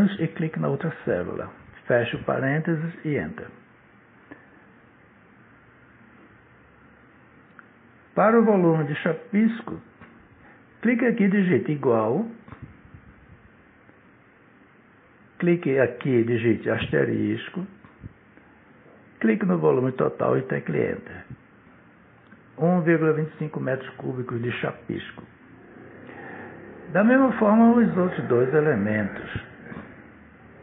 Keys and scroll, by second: 0.2 shift+0, 0.9 Return, 14.7 =, 18.2 *, 20.9 Return, 27.6 =, 30.1 *.